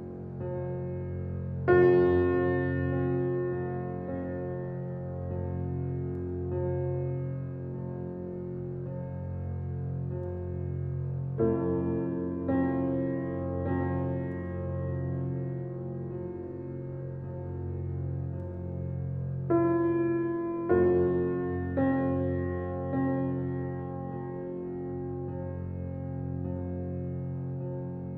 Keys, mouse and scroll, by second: 4.8 ctrl+alt+scroll down 1, 5.4 ctrl+alt+scroll up 1, 5.6 space, 5.7 click, 6.1 space, 6.7 alt+right click, 7.5-11.4 alt+drag, 19.1-22.9 drag, 24.0 ctrl+alt+z, 25.8-27.4 drag.